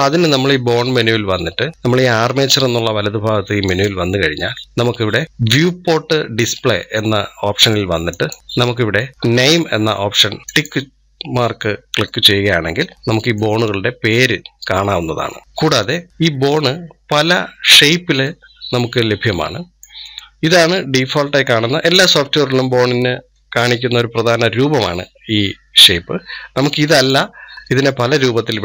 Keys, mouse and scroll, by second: 0.7 scroll down 2, 3.5 click, 8.0 click, 8.4 scroll down 2, 10.4 click, 11.9-13.4 middle drag, 13.4-14.0 scroll up 4, 14.0 scroll down 5, 16.6-17.2 scroll up 1, 18.1-23.0 middle drag, 26.8-28.6 drag.